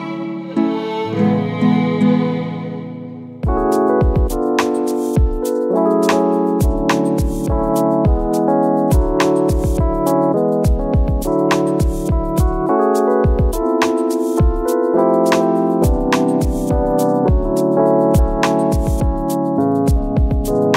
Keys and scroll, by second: 2.7 ctrl+z, 8.0 space, 11.5 ctrl+shift+i, 12.6 ctrl+d, 14.8 ctrl+d, 15.7 space.